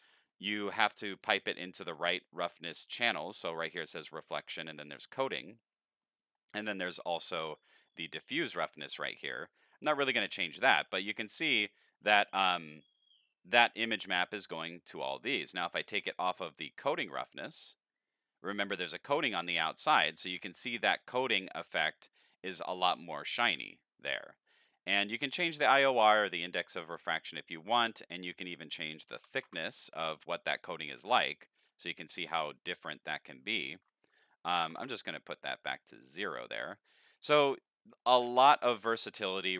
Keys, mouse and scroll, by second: 0.1-1.2 drag, 2.4 middle click, 2.9-3.3 scroll up 5, 6.0 middle click, 10.9-12.0 middle drag, 15.5 middle click, 16.7 click, 28.2 click, 29.3 Delete, 29.5 KP_Enter, 33.2 click, 37.1 middle click, 37.3-37.6 scroll down 2, 37.6 middle click.